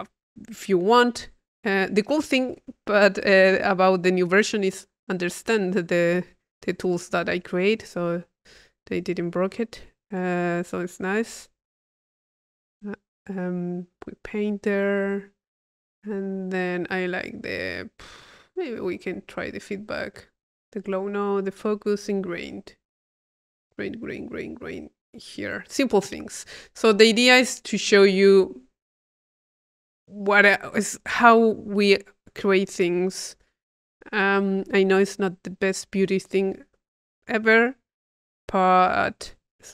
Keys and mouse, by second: 2.1 click, 5.5 click, 7.1 click, 8.4 click, 9.5-10.6 drag, 10.8 click, 12.0 click, 12.5 click, 14.4 click, 18.7 click, 20.2-21.5 drag, 21.6 click, 25.4-27.2 drag, 27.4 click, 28.3 click, 29.3 click, 29.6 click, 30.2 right click, 31.2 click, 32.1 click, 32.8 click, 33.8 click, 34.8 click, 35.8 click, 37.1-38.6 drag, 39.0-39.7 drag.